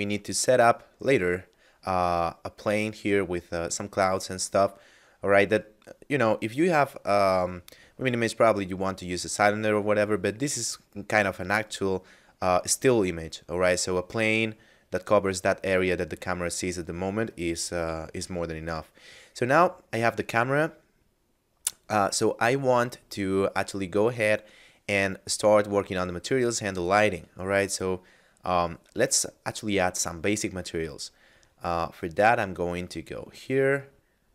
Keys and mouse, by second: 25.3 right click, 27.1 a, 28.9 right click, 30.4 middle click, 32.2 click.